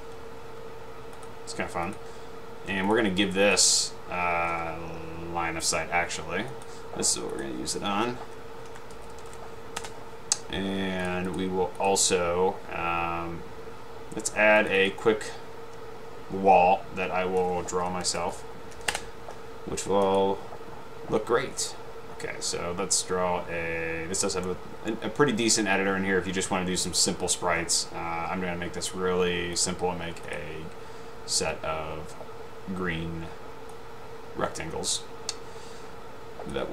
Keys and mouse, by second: 1.3 drag, 1.9-2.6 ctrl+drag, 3.0-3.3 drag, 3.5 click, 7.4 click, 9.0-9.9 typing, 11.1 click, 11.9-12.5 drag, 17.9-18.8 typing, 30.4 click, 34.4-36.7 drag.